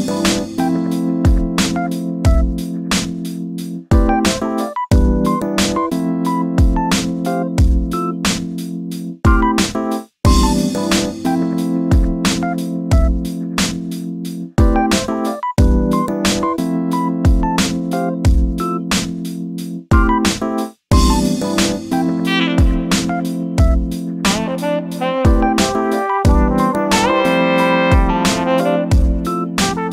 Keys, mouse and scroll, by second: 0.2 click, 0.8 g, 2.2 shift+d, 5.1-5.5 scroll down 3, 5.5 shift+middle click, 5.9 scroll down 1, 6.1-7.6 shift+middle drag, 7.9-9.0 shift+middle drag, 9.0 click, 10.1 shift+d, 12.4 s, 13.8-14.1 scroll up 1, 14.1 shift+middle click, 14.7 g, 18.2 shift+d, 20.5-22.8 typing, 23.4 shift+middle click, 24.1 shift+r, 24.3 shift+r, 24.5 shift+middle click, 24.9 shift+r, 25.1 shift+r, 25.4 shift+middle click, 25.8-26.3 scroll up 1, 26.3 1, 26.9 click, 27.9 g.